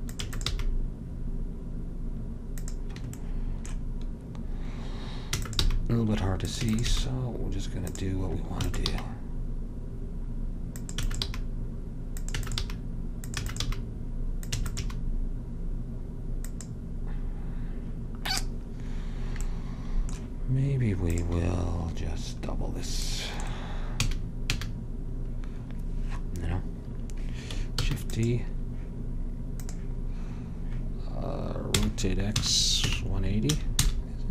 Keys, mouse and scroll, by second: 0.3 e, 0.6 g, 5.4 e, 5.8 g, 6.7 e, 7.1 g, 8.8 e, 9.2 g, 11.2 e, 11.4 g, 12.6 e, 12.8 g, 13.6 e, 13.8 g, 14.8 e, 15.1 g, 18.7-19.8 middle drag, 21.2-23.2 drag, 24.1 a, 24.6 a, 28.0 shift+d, 29.8-31.9 drag, 31.9 r.